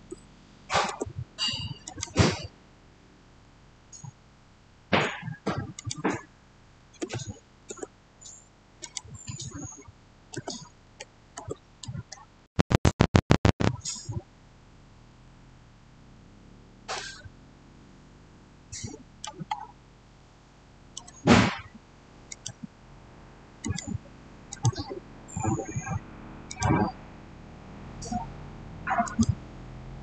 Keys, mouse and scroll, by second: 0.0-0.5 typing, 0.7 Return, 1.7 click, 3.1-3.6 typing, 4.7 Return, 5.6 click, 6.4-7.4 typing, 6.6 click, 7.5 Return, 8.7 click, 10.2-10.7 typing, 11.2 Return, 16.6 shift+Return, 16.8 shift+middle click, 19.4 shift+scroll up 1, 20.0-22.2 shift+middle drag, 22.2 click, 26.4 click, 28.9 click.